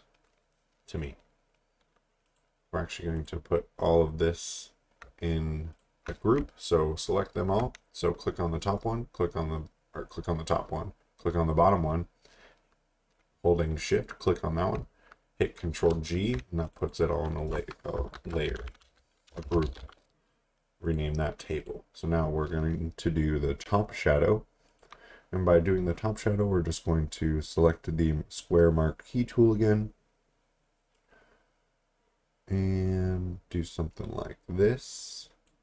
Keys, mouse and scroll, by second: 0.7-1.1 scroll down 1, 1.1-1.9 scroll up 1, 2.3 click, 3.8-5.0 scroll down 1, 5.7 shift+click, 8.0-10.5 scroll up 1, 10.5-12.6 scroll down 1, 15.7 ctrl+g, 16.7 click, 17.9-20.3 typing, 24.7 click, 30.9 click.